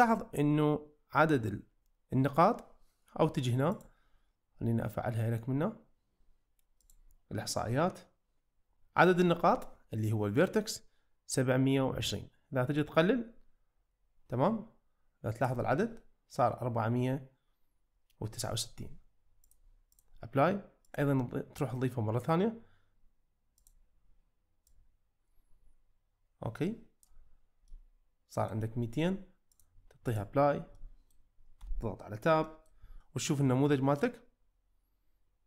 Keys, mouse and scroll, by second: 3.7-7.5 drag, 12.8-15.5 drag, 19.6-20.1 drag, 21.0-23.7 drag, 24.8-27.2 drag, 27.7-28.5 middle drag, 29.5-30.2 drag, 30.8 middle drag, 31.6 Tab, 32.5 shift+middle drag, 33.1-35.4 middle drag.